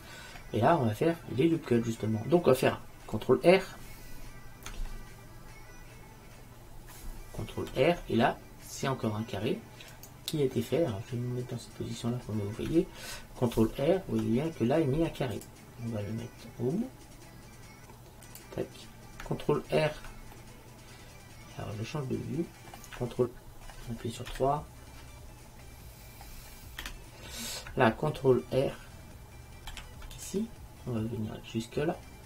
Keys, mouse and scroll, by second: 7.8 ctrl+r, 10.2-11.8 right drag, 10.7-11.7 drag, 11.8 click, 12.2 middle click, 13.8 ctrl+r, 20.7-22.3 middle drag, 24.4 KP_3, 26.9 KP_3, 29.8 ctrl+r.